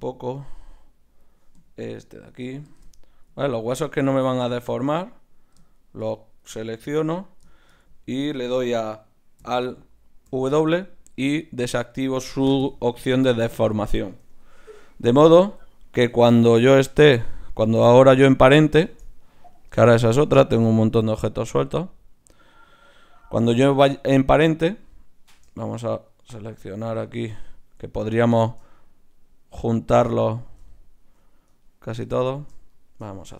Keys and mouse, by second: 2.8-10.3 drag, 10.3 alt+w, 15.3 Tab, 15.9 z, 16.6 Tab, 17.8-20.0 drag, 20.8-23.5 drag, 20.8 right click, 26.4-27.9 right drag, 29.9-32.2 right drag.